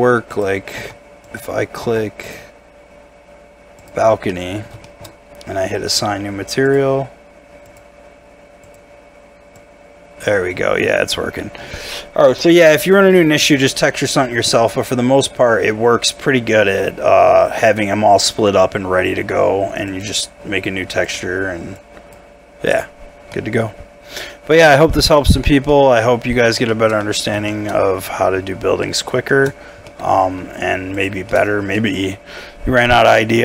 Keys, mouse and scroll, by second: 1.8 Tab, 2.8-4.3 scroll down 1, 4.3 middle click, 5.1 shift+scroll up 1, 10.4 scroll up 1, 10.9 middle click, 12.8-13.1 scroll down 1, 13.1 middle click, 23.0 scroll down 1, 23.3 middle click, 24.0 scroll down 1, 24.5 middle click, 25.2 Tab, 25.4 scroll up 1, 25.7 middle click, 26.3 scroll down 1, 26.7 shift+middle click, 27.0 middle click, 27.7 scroll up 1, 28.1 middle click, 28.6 scroll down 1, 28.8 middle click, 29.3 shift+middle click, 29.5 scroll up 1, 29.9 middle click, 31.0 shift+click, 31.3 shift+middle click.